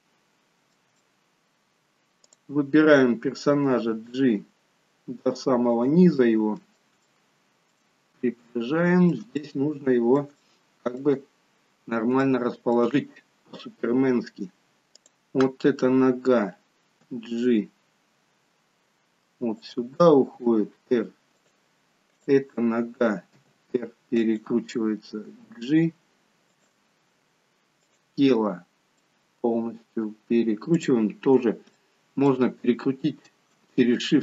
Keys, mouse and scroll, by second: 0.9 shift+middle click, 1.4 middle click, 2.3 click, 3.7 g, 6.2 middle click, 7.0 shift+middle click, 7.8-8.5 scroll up 1, 8.5 shift+middle click, 8.5-9.4 scroll up 6, 9.4 middle click, 10.4 shift+middle click, 11.7-12.2 scroll down 1, 12.2 shift+middle click, 15.1 click, 17.1 g, 20.3 r, 22.1 click, 23.5 r, 25.4 g, 27.7 click, 29.1 middle click, 30.8 click, 31.3 scroll up 1, 31.8 shift+middle click.